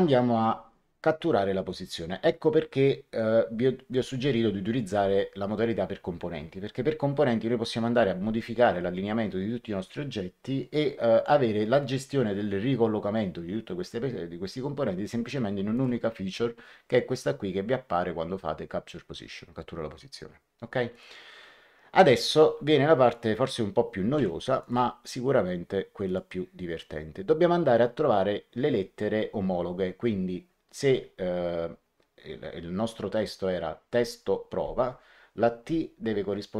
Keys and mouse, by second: 15.7 click, 20.8 click, 22.1 click, 23.0 shift+click, 24.1 v, 24.5 click, 26.0 click.